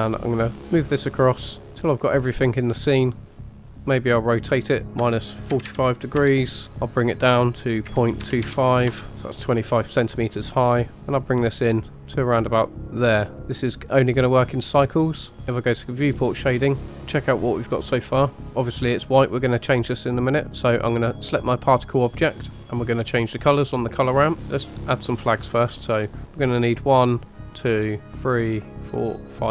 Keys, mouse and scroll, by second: 3.3 click, 3.9-7.0 drag, 7.1-8.9 drag, 10.9-13.3 drag, 16.0-16.7 drag, 16.8 shift+middle click, 20.4 click, 21.3 click, 24.5 middle click, 24.7 click, 26.7 click, 28.1 click.